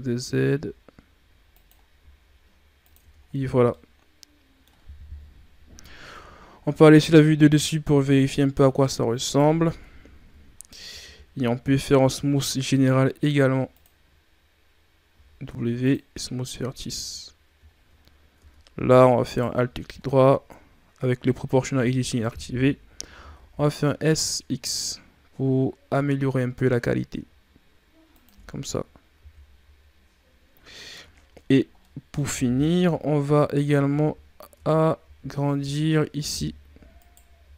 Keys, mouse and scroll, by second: 1.9 s, 2.9 Tab, 3.1 scroll down 4, 3.5-5.1 middle drag, 5.1 KP_3, 6.0 KP_7, 7.2-7.8 shift+scroll down 6, 8.5-9.1 scroll up 3, 9.1 right click, 9.6 Tab, 10.8 a, 11.0 a, 11.8 w, 15.0 w, 16.4 Tab, 16.8-17.7 scroll down 3, 17.8-18.2 scroll up 4, 18.2 Tab, 19.1 alt+right click, 21.7 o, 23.0 s, 28.3 Tab, 28.5-29.0 scroll down 6, 29.0 a, 30.5-31.4 scroll up 10, 31.7-32.6 middle drag, 32.6 KP_3, 33.5-33.9 ctrl+scroll up 3, 33.9-34.2 shift+scroll down 6, 34.3 scroll up 1, 34.4 Tab, 34.9 z, 35.5 z, 36.1 z, 36.9 alt+right click.